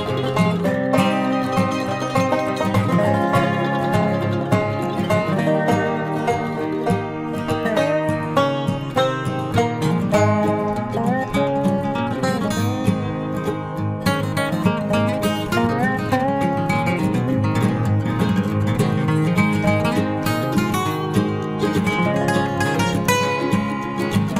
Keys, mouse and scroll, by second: 0.1 e, 1.4-2.8 middle drag, 2.2-3.9 drag, 3.2 KP_3, 3.6 Tab, 4.1 ctrl+s, 4.5 z, 5.4-7.3 middle drag, 9.6 z, 10.1 Tab, 10.4-11.6 middle drag, 11.8-13.6 right drag, 13.6 click, 14.2-16.6 right drag, 15.6 e, 16.6-18.3 drag, 18.0 c, 19.3-21.0 drag, 21.0-22.3 middle drag, 22.3 s, 23.8 e.